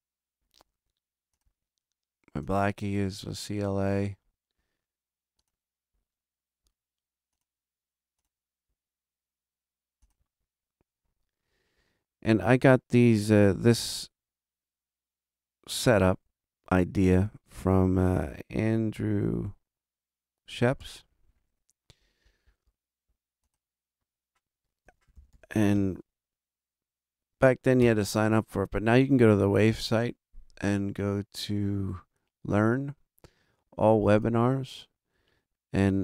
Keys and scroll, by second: 28.1 Return.